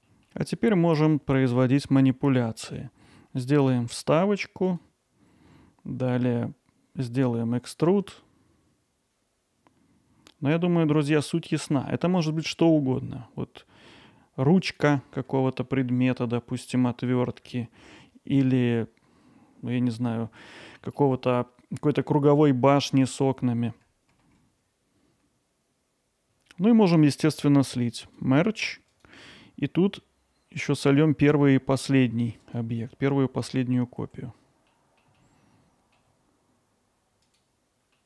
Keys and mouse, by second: 0.3 alt+middle click, 14.6-15.3 drag, 15.4-17.3 alt+middle drag, 20.4 click, 20.8 alt+middle click, 25.5 click, 25.7 alt+middle click, 25.9 drag, 26.1 middle click, 28.0 click, 28.9 click, 32.5 click, 32.9 alt+middle drag, 34.7-35.0 middle drag, 35.2-35.9 alt+middle drag, 37.2 click, 38.0 middle click.